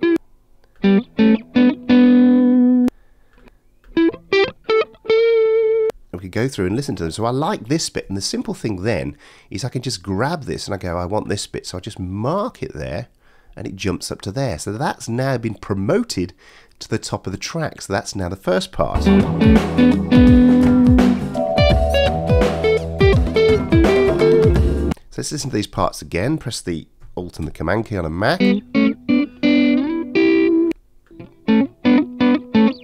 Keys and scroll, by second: 18.9 space.